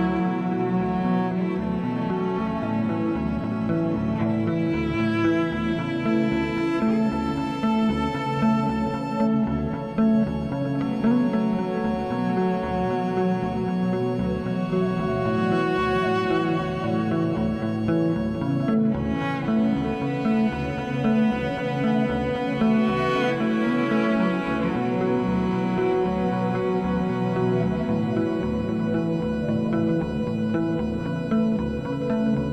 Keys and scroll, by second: 1.8 s, 3.7 s, 8.3 s, 13.8 s, 15.6 s, 21.0 1, 21.5 s, 26.1 alt+e, 27.2 s, 28.7 4, 29.0 s.